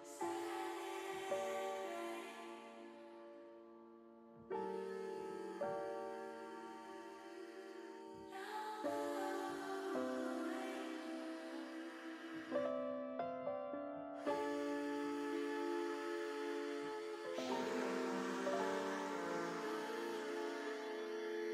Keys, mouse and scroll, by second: 1.4-2.4 drag, 2.9 middle click, 3.9-5.2 drag, 5.8 click, 6.1 click, 6.7 click, 8.2 click, 9.8 KP_0, 11.4-12.9 drag, 13.9 middle click, 15.5 click, 17.5-19.4 drag, 20.2 KP_0.